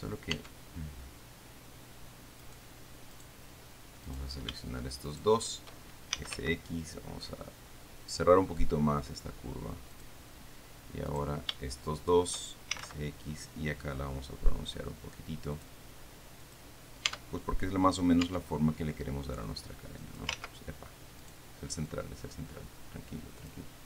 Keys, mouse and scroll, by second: 0.6 Tab, 2.7-3.7 right drag, 4.3 right click, 5.4 shift+right click, 6.2-7.1 typing, 10.2 click, 11.4 right click, 11.6 click, 12.3 shift+click, 12.4 shift+right click, 12.5 shift+click, 12.8-13.6 typing, 15.8 click, 16.7 click, 17.4 Tab, 18.5 Tab, 19.7 click, 20.6 ctrl+z, 21.5 click, 22.2-23.8 drag.